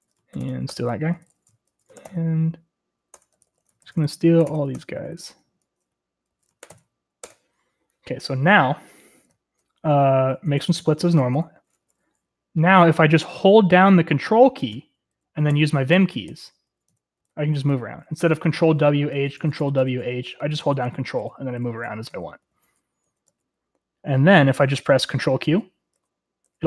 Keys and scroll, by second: 0.0-6.8 typing, 7.3 ctrl+r, 7.3 ctrl+l, 7.3 Return, 7.8 Return, 9.3-11.8 typing, 11.8 ctrl+w, 11.8 ctrl+s, 15.7 ctrl+j, 16.1 ctrl+j, 16.5 ctrl+l, 16.9 ctrl+h, 17.1 ctrl+k, 17.4 ctrl+k, 17.5 ctrl+j, 17.7 ctrl+j, 18.0 ctrl+l, 18.3 ctrl+h, 18.6 ctrl+k, 18.9 ctrl+j, 19.3 ctrl+k, 19.4 ctrl+j, 19.5 ctrl+k, 19.7 ctrl+k, 19.8 ctrl+j, 20.0 ctrl+j, 20.2 ctrl+k, 20.8 ctrl+l, 20.9 ctrl+l, 21.1 ctrl+h, 21.3 ctrl+j, 21.5 ctrl+k, 21.7 ctrl+k, 22.1 ctrl+j, 22.2 ctrl+j, 22.3 ctrl+l, 22.7 ctrl+k, 22.9 ctrl+h, 23.3 ctrl+k, 23.5 ctrl+j, 25.7 ctrl+q, 26.2 ctrl+q.